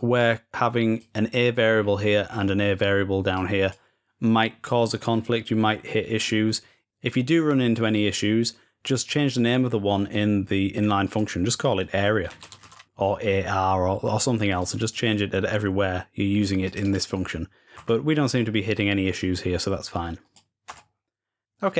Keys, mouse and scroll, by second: 0.0-1.6 drag, 1.6-2.9 scroll down 4, 2.9 scroll down 1, 3.1-4.2 drag, 8.7 click, 10.8 right click, 14.4 right click, 16.4 click, 16.6 click, 17.9-20.0 scroll up 1, 20.0 click, 20.8-21.4 scroll up 1.